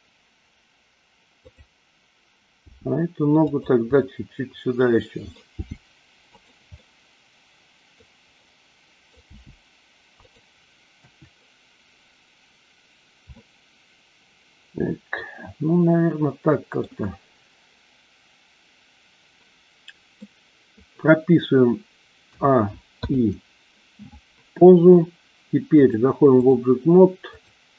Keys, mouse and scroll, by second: 1.5 click, 2.7 g, 3.5 click, 4.0-5.3 middle drag, 5.6 g, 6.7-8.0 middle drag, 6.7 scroll up 1, 8.3 middle click, 8.3 scroll up 1, 9.2 g, 10.2 click, 11.0 KP_1, 13.2 scroll up 1, 13.3-16.8 middle drag, 20.2 middle click, 20.6 scroll down 1, 22.3 a, 22.9 i, 25.8-26.6 drag, 27.3-27.7 drag.